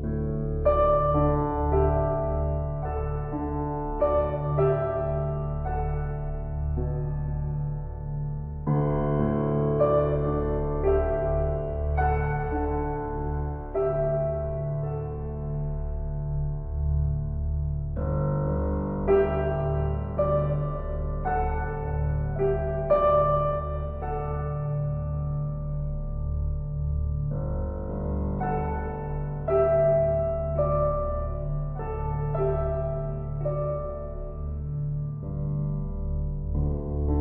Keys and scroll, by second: 18.2 ].